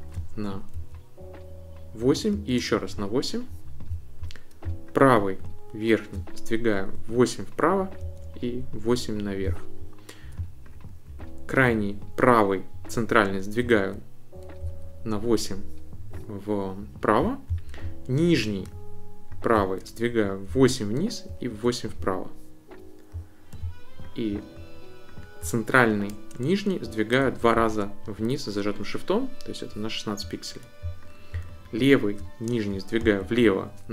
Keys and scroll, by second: 0.8 shift+Up, 2.3 shift+Up, 6.7 shift+Right, 8.0 shift+Up, 13.7 shift+Right, 14.6 shift+Left, 20.5 shift+Down, 21.3 shift+Right, 27.2 shift+Down, 33.0 shift+Left.